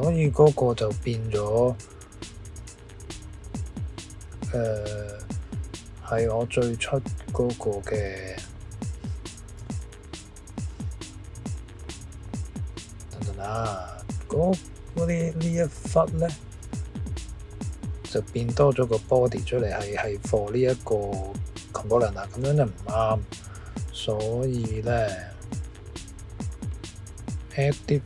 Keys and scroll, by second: 10.3 Escape.